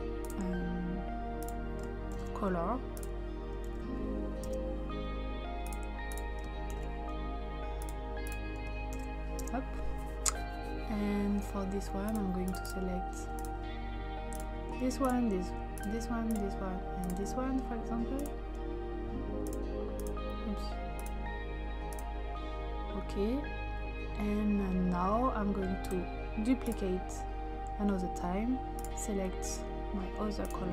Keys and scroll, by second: 2.1 ctrl+c, 3.7 ctrl+v, 4.5 Return, 6.7 ctrl+c, 8.9 ctrl+v, 9.4 Return.